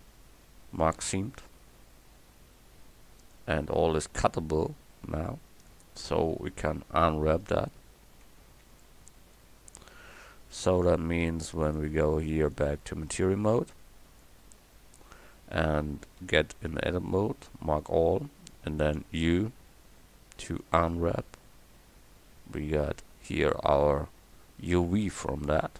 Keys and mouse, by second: 1.0-3.2 middle drag, 4.3 middle click, 7.4 KP_1, 14.7 Tab, 15.6 Tab, 16.2 a, 19.0 u, 25.6 click.